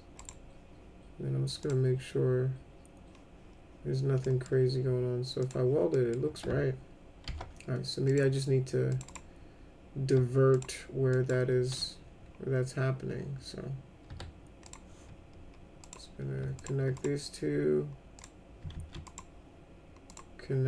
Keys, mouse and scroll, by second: 0.2 right click, 1.6 click, 4.3 middle click, 5.4 click, 5.9 middle click, 7.2 alt+c, 8.1 click, 8.9 click, 9.1 right click, 10.5 click, 11.1 click, 14.1 2, 14.7 click, 15.8 click, 16.6 ctrl+click, 17.0 right click, 18.2 click, 18.7 ctrl+z, 19.1 right click, 20.1 click.